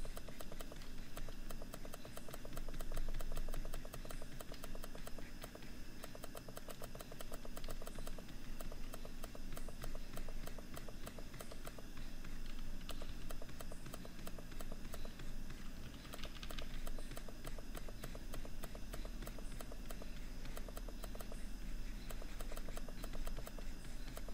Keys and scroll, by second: 18.4 ctrl+-.